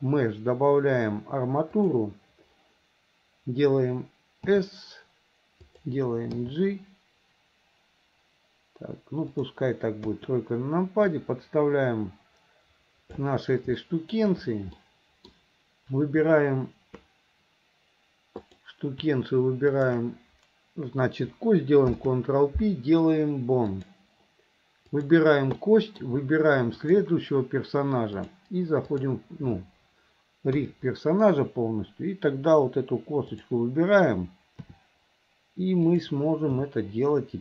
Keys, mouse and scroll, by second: 5.1 s, 7.1 g, 10.1 KP_3, 11.2-13.3 drag, 13.8 shift+middle click, 14.8 middle click, 18.4 click, 19.8 shift+click, 25.0 click, 25.7 middle click, 26.8 shift+click, 28.2 click, 30.6 KP_3, 33.3 click, 36.1 r.